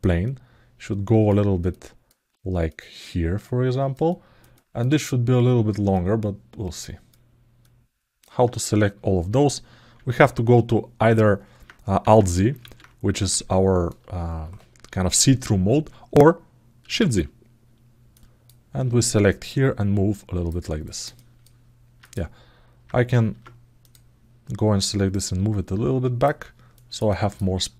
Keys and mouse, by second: 0.0-1.1 drag, 1.5 alt+middle click, 1.7 alt+click, 2.5-3.7 drag, 3.8 alt+middle click, 5.7-6.9 alt+middle drag, 7.4 alt+middle click, 9.5 alt+z, 11.7 alt+z, 12.3 alt+z, 13.2 alt+z, 16.8 shift+z, 18.0 click, 19.3 click, 20.6 ctrl+alt+middle click, 23.1 ctrl+Tab, 23.6 click, 24.9-26.0 drag, 26.5 alt+middle click, 26.8 ctrl+alt+middle click, 27.3 alt+middle click.